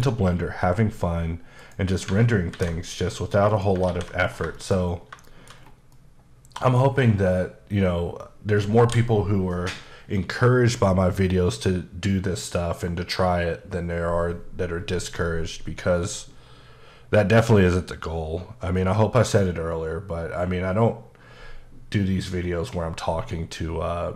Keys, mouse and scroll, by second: 0.1-1.6 scroll up 1, 1.6 click, 2.6 alt+m, 3.5 click, 3.9 alt+a, 4.3 scroll down 2, 4.6 shift+middle click, 4.9 scroll up 2, 5.3 shift+middle click, 5.6-6.0 scroll down 2, 6.0 middle click, 6.0 middle click, 7.0-9.2 scroll up 1.